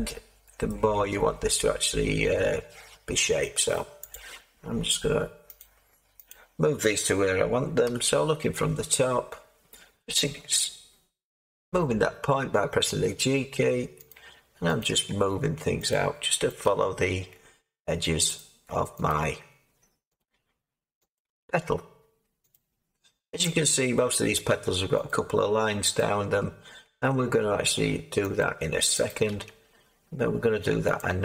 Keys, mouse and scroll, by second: 0.6-4.1 middle drag, 4.1-14.9 drag, 7.9 7, 11.5 g, 14.9 g, 16.6 g.